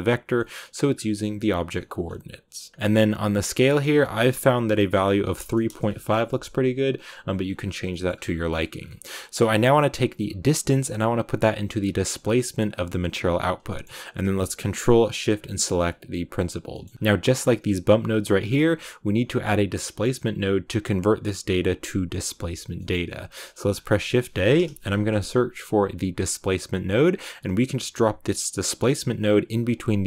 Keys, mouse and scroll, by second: 16.9-27.0 drag.